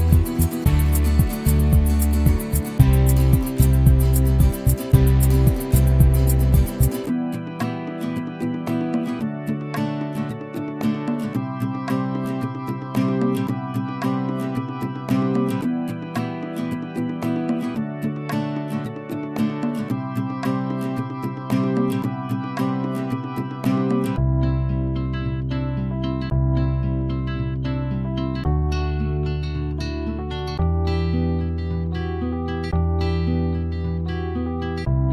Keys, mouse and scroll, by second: 0.0 alt+click, 0.6 alt+middle click, 1.1 alt+click, 2.0 alt+middle click, 2.4 click, 2.8 alt+middle click, 2.9 click, 3.2 alt+middle click, 3.5 click, 3.9 right click, 4.1 alt+click, 4.6-5.6 alt+middle drag, 5.6 alt+click, 6.3 scroll down 2, 6.5-6.8 ctrl+z, 6.9 alt+middle click, 7.0 ctrl+z, 7.1 ctrl+z, 7.5 alt+click, 7.7-8.1 ctrl+z, 8.9 alt+middle click, 9.5-11.6 right drag, 11.6 click, 12.1 right click, 12.5 ctrl+z, 12.7-15.9 right drag, 15.9 alt+middle click, 16.2 f, 18.1 click, 19.4-21.0 right drag, 21.0 ctrl+z, 21.2 right click, 21.5 scroll up 1, 21.7-23.5 shift+right drag, 23.5 alt+middle click, 23.9 right click, 24.4-25.6 drag, 25.6 right click, 26.2 f, 26.4-27.5 shift+drag, 27.5-29.1 right drag, 29.1 alt+middle click, 30.1-31.8 drag, 31.8-32.9 right drag, 32.9 alt+click, 33.3 alt+middle click, 33.7-35.1 drag.